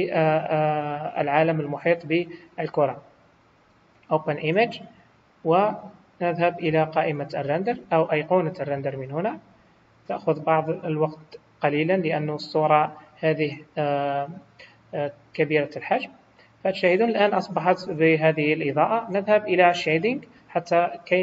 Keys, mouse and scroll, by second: 12.9 click.